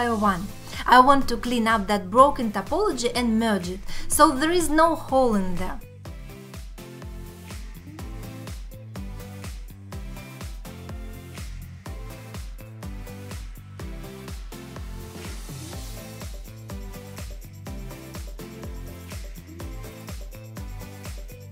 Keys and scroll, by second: 0.1 alt+q, 1.0 alt+q, 1.4 x, 2.7 x, 3.3 alt+q, 6.1 x, 7.1 x, 9.2 alt+z, 9.8 x, 11.0 x, 11.7 alt+x, 12.1 alt+z, 13.0 alt+q, 13.7 1, 14.8 2, 15.1 3, 15.4 x, 17.2 alt+q, 17.9 x, 18.3 alt+q, 18.7 alt+q, 18.9 alt+q, 20.8 alt+q.